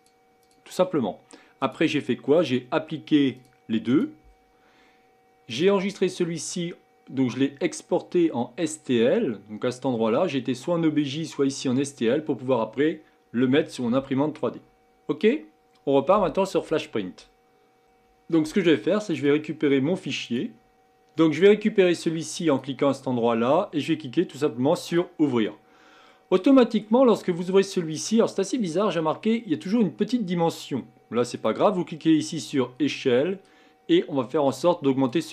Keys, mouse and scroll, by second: 0.0 click, 0.4 click, 1.6-8.6 drag.